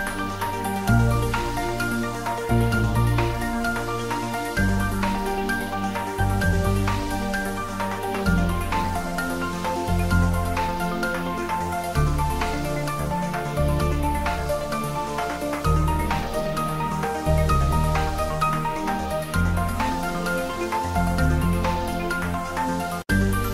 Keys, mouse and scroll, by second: 3.9 click, 7.8 click, 8.9 scroll down 1, 9.7 d, 10.2 x, 12.1 click, 13.5 r, 15.5 click, 16.3 g, 16.5 z, 17.1 click, 19.7-20.1 scroll up 1.